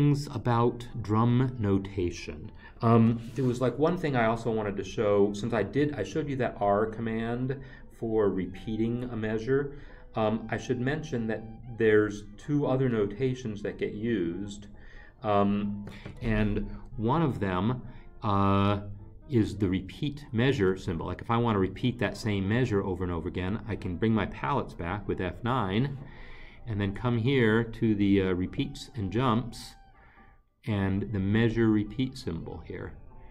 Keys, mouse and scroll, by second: 17.4 alt+Tab, 20.8 Escape.